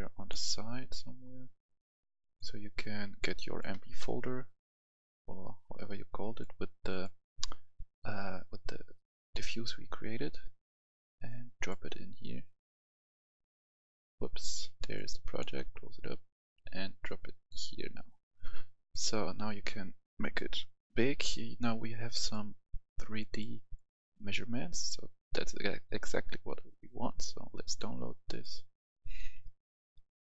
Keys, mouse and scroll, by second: 10.0 scroll down 1, 11.2-24.6 drag, 26.2-27.6 scroll down 1, 27.6-30.2 drag.